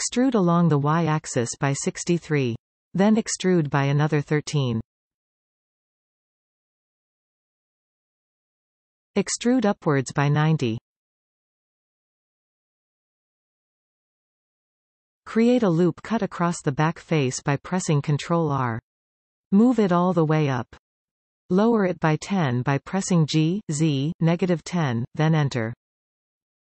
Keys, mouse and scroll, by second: 0.3 e, 4.7 e, 7.0-9.0 middle drag, 9.0 e, 11.5-15.0 middle drag, 15.0 alt+a, 15.5 ctrl+r, 19.3 g, 23.5-26.7 middle drag.